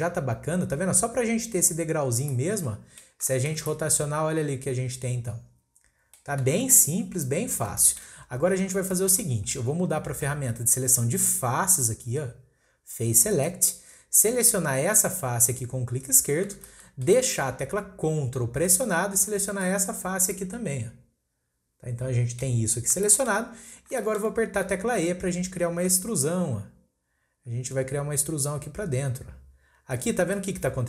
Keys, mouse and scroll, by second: 0.3-1.3 scroll up 2, 2.1 scroll down 1, 2.3-6.6 middle drag, 7.5 scroll down 1, 7.8-8.2 shift+middle drag, 8.2-8.9 scroll up 1, 8.9-12.0 shift+middle drag, 13.4 click, 16.0 click, 16.7-19.5 shift+middle drag, 19.5 ctrl+click, 19.9-20.3 scroll down 1, 20.3-22.6 middle drag, 22.6-23.0 scroll up 1, 23.0-24.2 shift+middle drag, 24.2-25.9 shift+scroll up 2, 25.9 e, 30.3 scroll down 1, 30.4 middle click.